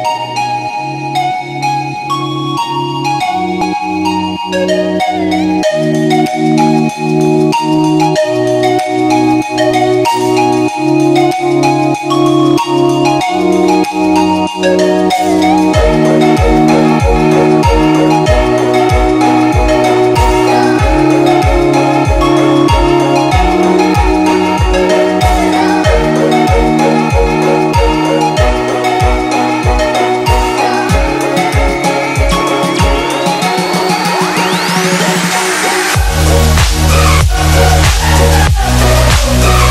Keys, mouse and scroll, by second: 5.6 click, 7.8-8.2 drag, 19.2 ctrl+=, 20.3 click, 21.7-22.2 space, 22.3 click, 22.4 space, 22.9 click, 27.9 ctrl+z, 28.5 click, 29.2 space, 29.5 click, 29.5 space, 30.5-31.0 drag, 38.0 click, 39.1 ctrl+=, 39.6-39.7 typing.